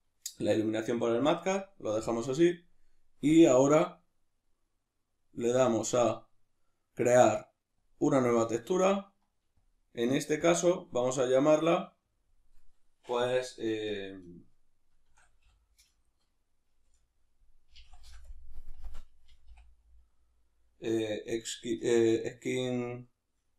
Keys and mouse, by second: 4.3-7.7 middle drag, 7.7-23.5 drag.